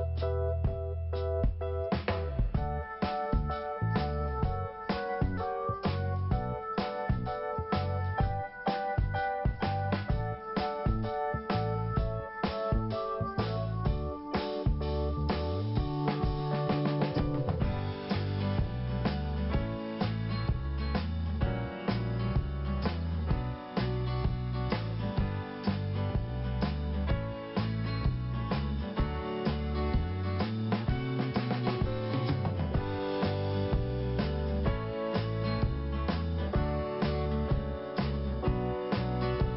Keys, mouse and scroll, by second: 0.1 t, 0.7 scroll down 1, 1.8 click, 2.7 scroll up 1, 4.5 click, 6.2 click, 8.2 click, 10.5 click, 12.4 click, 14.8 p, 15.8 click, 16.7 scroll down 1, 17.8 scroll up 1, 20.5 scroll up 1, 20.6 click, 22.1 click, 22.2 click, 23.3 click, 23.4 click, 24.1 click, 24.2 click, 24.5 scroll down 1, 25.7 click, 27.5 middle click, 28.5-29.0 scroll down 1, 29.7 click, 30.8 middle click, 31.5 scroll up 1, 33.6 click, 34.9 click, 36.8 click, 38.7 click.